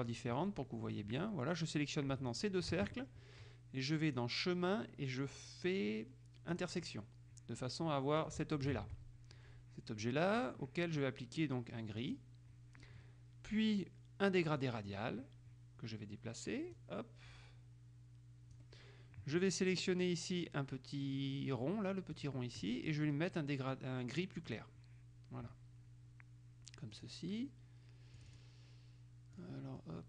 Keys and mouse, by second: 0.2 click, 2.4 shift+click, 4.2 click, 6.7 click, 8.4-9.4 drag, 9.0 ctrl+z, 10.6 click, 12.2 click, 14.7 click, 16.9-19.2 drag, 22.3 click, 24.6 click, 27.1 click, 28.4 click, 29.6-30.0 drag.